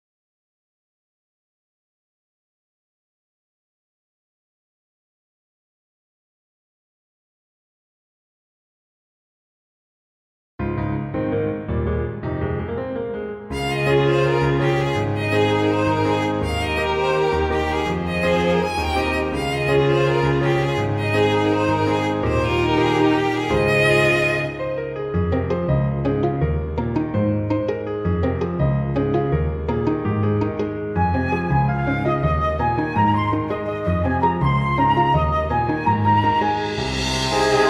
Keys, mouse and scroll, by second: 1.3 click, 2.3 click, 16.4 click, 17.9 click, 19.2 click, 20.5 click, 21.9 click, 27.4 click, 34.1 click.